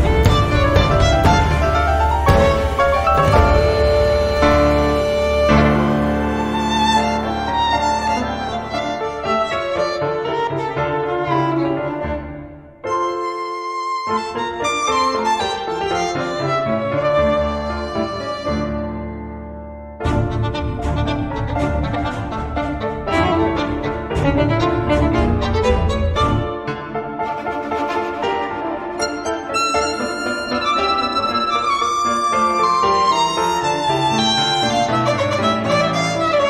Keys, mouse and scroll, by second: 1.0 click, 6.3 click, 8.1 click, 9.1 click, 10.8 click, 13.0 click, 13.9 click, 15.1 click, 18.4 click, 19.1 click, 20.1 click, 20.8 click, 21.4-24.0 drag, 24.7 click, 25.6 space, 26.5 click, 27.2 click, 27.9 middle click, 32.4 click, 33.8 click, 34.9 click.